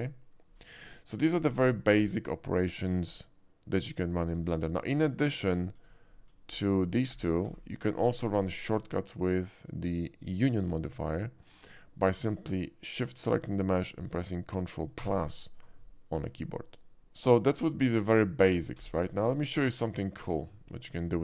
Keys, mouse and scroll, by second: 0.4 middle click, 0.9 shift+middle drag, 5.2 click, 5.6 shift+middle drag, 6.1 shift+middle click, 7.0 shift+d, 8.5 y, 9.5 click, 10.9 middle click, 12.9 shift+click, 15.1 ctrl+KP_Add, 18.1 middle click, 18.6-20.4 typing, 19.7 click.